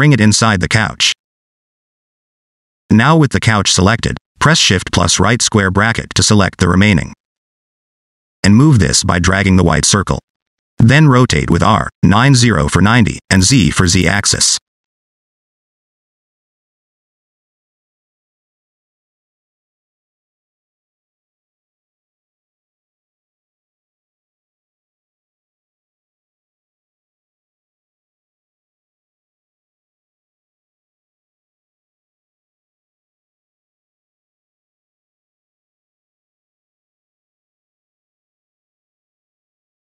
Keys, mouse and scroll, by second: 0.6 click, 2.9 alt+z, 3.4 Tab, 5.2 click, 6.9 shift+], 7.7-8.5 scroll down 3, 8.5 click, 11.2 r, 14.7 click, 15.3 middle click, 15.9 shift+middle click, 16.2 middle click, 16.7 shift+middle click, 16.8 middle click, 17.1 shift+middle click, 18.3 middle click, 20.2 click, 21.1 middle click, 22.3 click, 23.3 middle click, 24.1 scroll up 2, 24.4 middle click, 24.8 click, 25.2 scroll down 2, 25.3 middle click, 25.8 r, 27.6 click, 28.4 click, 29.8 click.